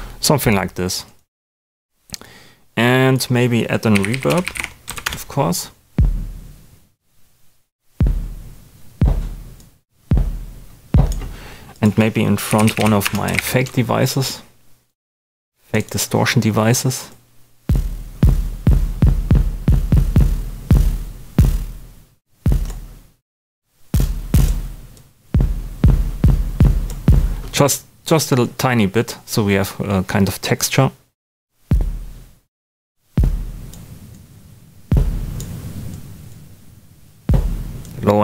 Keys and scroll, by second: 3.7-5.0 typing, 12.2-13.8 typing.